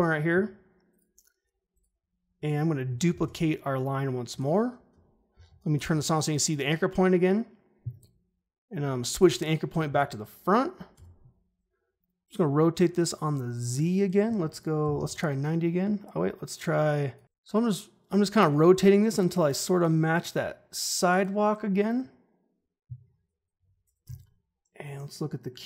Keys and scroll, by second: 3.0 ctrl+d, 5.3 ctrl+shift+h, 10.9 r, 11.9 ctrl+z, 14.5-15.4 typing, 17.2 ctrl+z, 24.0 u.